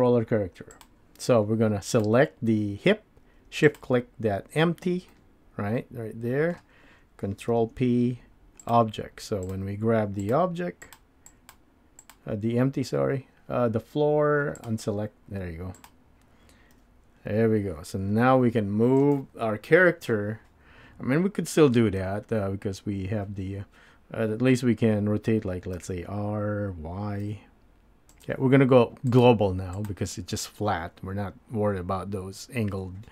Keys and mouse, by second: 1.9 click, 5.1-6.6 middle drag, 7.5 ctrl+p, 11.3 click, 11.5 click, 12.1 click, 14.6 drag, 15.8 click, 16.7 g, 25.7 r, 29.1-30.2 drag.